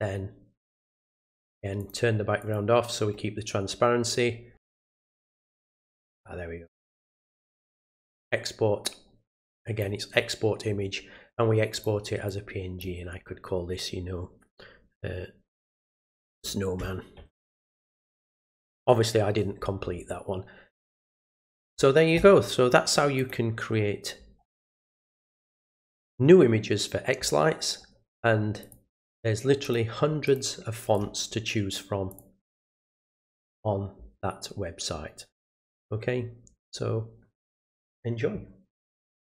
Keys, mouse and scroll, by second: 1.8 click, 2.4 click, 4.5 click, 6.1 click, 9.3-9.8 drag, 11.7 click, 12.2 click, 20.7 click, 23.1 click, 27.8 middle click, 27.8 scroll down 1, 28.6 click, 29.6 click, 30.2 click, 30.9 click, 32.1 click, 33.2 scroll up 1, 39.2 click.